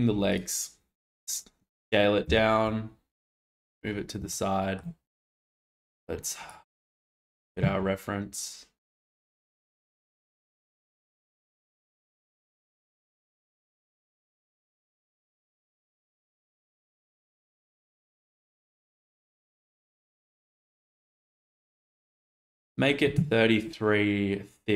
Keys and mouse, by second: 3.4-4.1 drag, 3.4 g, 4.2-4.7 shift+middle drag, 6.4 click, 9.0 s, 9.3 z, 9.6 x, 13.2 g, 18.2-19.3 drag, 19.2 3, 20.6-21.6 middle drag.